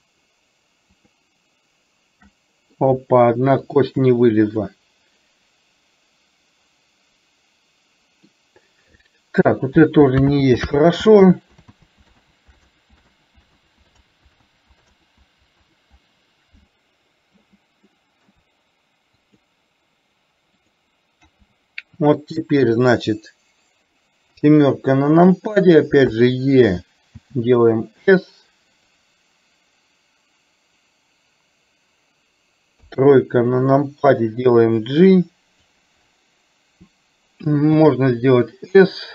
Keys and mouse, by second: 1.1 shift+click, 2.3 middle click, 3.8 shift+click, 4.7-6.7 middle drag, 7.0 middle click, 8.2 middle click, 9.8 ctrl+z, 10.5 ctrl+z, 10.8 ctrl+z, 11.3 ctrl+z, 11.8 ctrl+z, 12.3 ctrl+z, 12.7 ctrl+z, 13.7 ctrl+z, 14.1 ctrl+z, 14.6 ctrl+z, 15.1 ctrl+z, 15.8 ctrl+z, 17.8 middle click, 19.5 shift+click, 20.7 shift+click, 24.3 KP_7, 26.2 e, 32.8 KP_3, 34.6-35.7 drag.